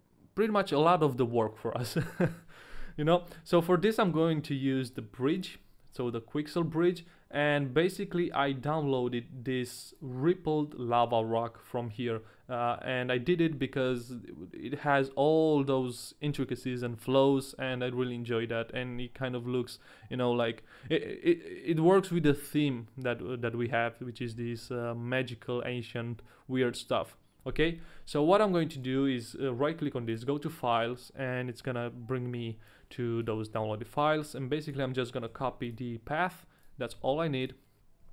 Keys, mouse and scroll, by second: 4.8 click, 38.0 a.